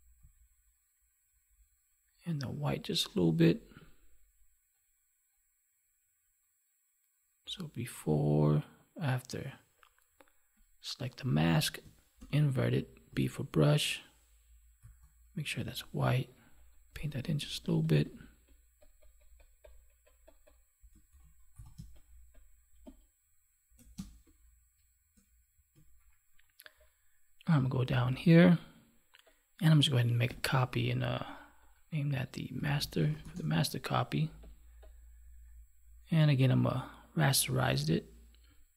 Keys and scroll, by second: 12.1 ctrl+i, 21.0 ctrl+s, 21.7 space, 30.2 ctrl+j.